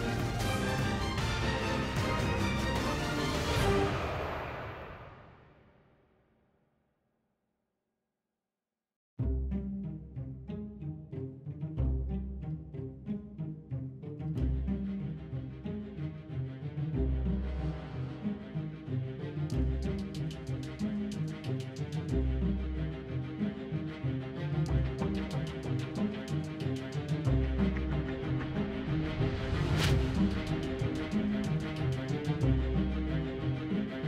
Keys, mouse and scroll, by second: 0.2 Tab, 1.3 KP_7, 1.5 Tab, 2.8 KP_1, 6.4 Tab, 7.6 Tab, 8.5 a, 8.6 a, 9.5 space, 13.0 F6, 14.5 Tab, 17.6 z, 18.0 KP_7, 18.6 Tab, 19.0 Tab.